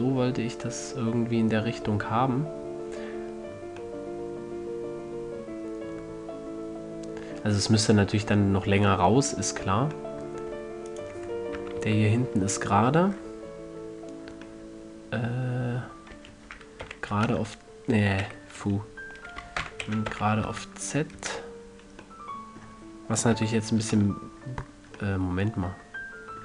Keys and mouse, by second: 4.2-6.2 middle drag, 6.4-7.2 middle drag, 8.6 Tab, 9.2-13.0 middle drag, 11.9 KP_1, 12.2 KP_3, 13.5 middle click, 16.5 s, 20.0 alt+o, 20.2 s, 23.7 KP_1, 24.2 KP_3, 25.6 middle click.